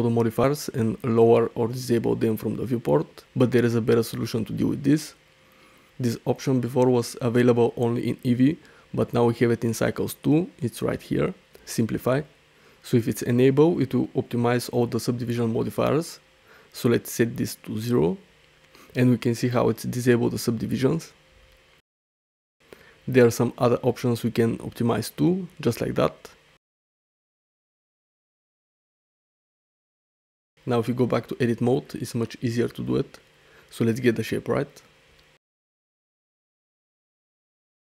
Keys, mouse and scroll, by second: 2.2 click, 6.2 click, 8.4-9.8 drag, 10.0 click, 13.8 click, 17.9 click, 19.7-20.0 shift+middle drag, 20.6 shift+middle click, 22.6 shift+middle click, 23.1 middle click, 25.4-27.2 drag, 29.3 shift+middle drag, 30.3 click, 30.7-31.1 middle drag, 31.4 Tab, 31.9 click, 32.4 g, 33.1 click, 34.0 g, 35.2 click, 35.7 g, 36.2 g, 36.2 r, 36.8 click, 36.9 ctrl+t.